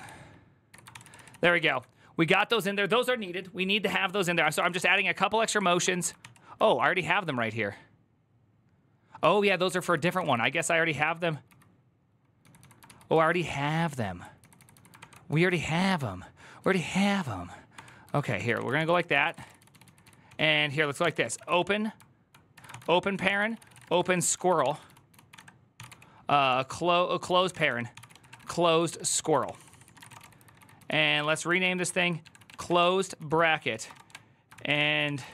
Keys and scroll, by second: 0.0-1.8 typing, 0.5 Tab, 0.7 ctrl+c, 0.8 ctrl+c, 4.3 ctrl+c, 4.4 typing, 4.5 Return, 4.7 ctrl+d, 5.6 ctrl+d, 6.0 ctrl+c, 6.5-7.0 typing, 9.0-35.3 typing, 9.4 ctrl+c, 12.9 ctrl+u, 14.8 ctrl+d, 22.3 Tab, 28.8 ctrl+n, 29.2 ctrl+c.